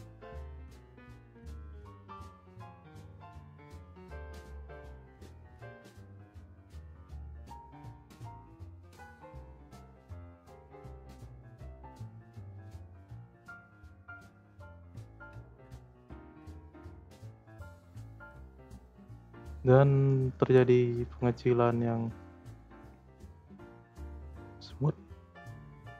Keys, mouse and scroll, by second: 0.3 click, 1.0 scroll down 2, 1.2 middle click, 1.6-2.3 scroll up 1, 2.3 middle click, 2.9-4.2 scroll up 9, 3.1 middle click, 4.2 click, 4.6 click, 5.3 click, 6.3 click, 7.8-8.2 drag, 8.3 space, 9.1 space, 9.5-10.0 drag, 10.1 space, 11.8 space, 12.2-12.8 drag, 12.8 space, 13.6 space, 14.1-14.5 scroll down 4, 14.5-15.8 middle drag, 15.8 space, 16.5 space, 17.2-20.3 drag.